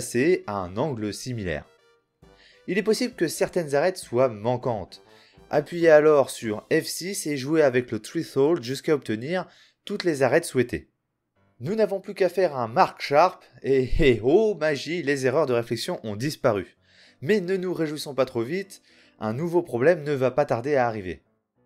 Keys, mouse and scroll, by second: 1.8 F6, 11.7 space, 16.5 middle click, 17.1 Tab, 21.1 middle click.